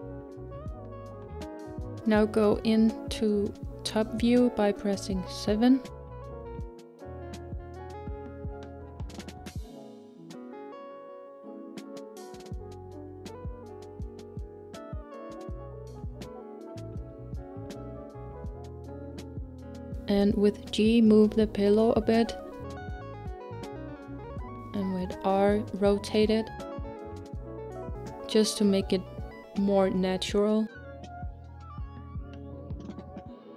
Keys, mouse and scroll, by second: 1.3 KP_7, 6.1 click, 7.2-7.7 scroll down 2, 7.7-10.9 middle drag, 10.9-11.7 scroll up 1, 11.7 g, 16.7 KP_7, 16.8 click, 19.1 click, 22.3 g.